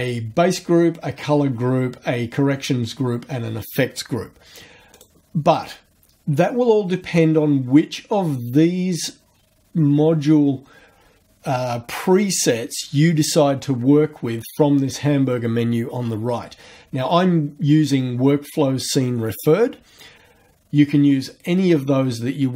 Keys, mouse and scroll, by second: 4.9 click.